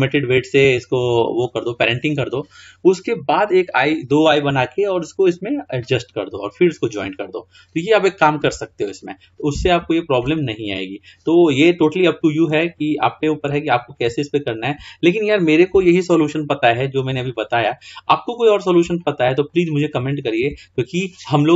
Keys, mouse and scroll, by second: 7.4-9.1 scroll down 3, 9.1-10.0 scroll up 9, 10.0-11.3 scroll down 12, 12.0-12.8 shift+middle drag, 12.8 scroll up 5, 13.7-14.2 shift+middle drag, 14.2 shift+scroll down 1, 14.4-14.9 scroll up 3, 14.9-15.7 scroll down 2, 15.8 KP_1, 17.0-17.5 scroll up 2, 17.5-18.4 shift+middle drag, 18.4-18.9 scroll up 3, 19.1-21.5 shift+middle drag.